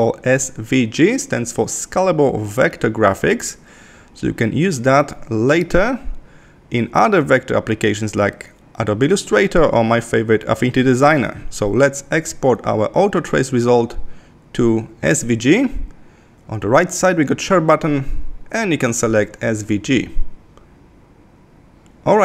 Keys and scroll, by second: 2.3 super+-.